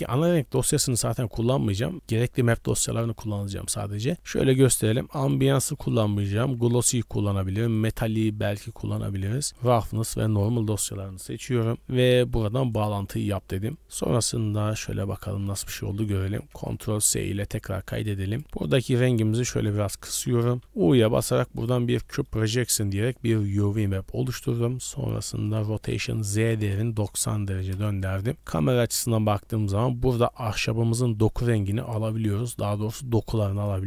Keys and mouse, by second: 14.6 middle click, 15.2 z, 15.9 shift+middle click, 16.2 middle click, 16.9 ctrl+s, 17.9 click, 18.4 click, 20.0 middle click, 20.8 u, 22.0 click, 22.6 Tab, 22.8 click, 23.8 click, 27.7 KP_0, 28.3 shift+middle drag, 30.4 middle click, 31.0 middle click, 32.3 middle click.